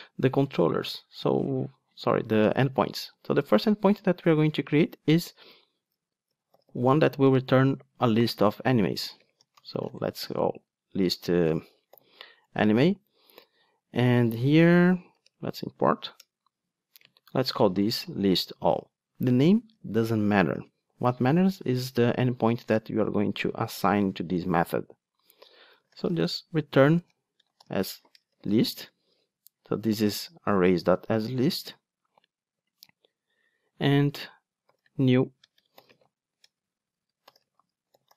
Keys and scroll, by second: 12.5 Return, 15.3 alt+Return, 30.1 alt+Return.